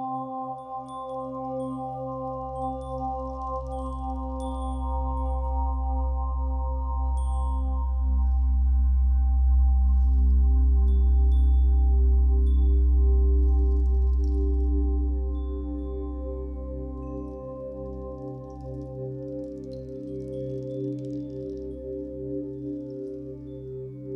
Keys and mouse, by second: 0.0-1.3 drag, 2.0 click, 6.8 click, 9.2 click, 13.4 click, 16.5 click, 17.1 click, 18.4 click, 19.3 click, 22.4-23.2 drag.